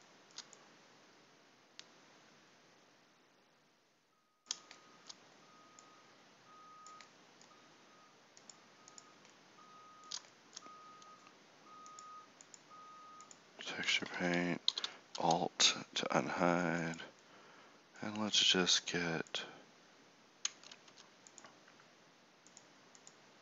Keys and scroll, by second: 13.8 Tab, 14.7 alt+h, 15.2 Tab, 20.5 Tab, 20.8 Tab.